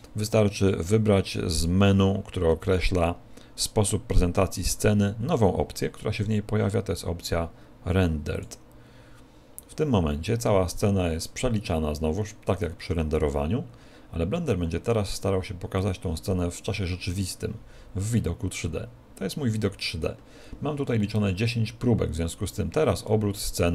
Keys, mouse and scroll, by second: 1.7 click, 23.1 middle click.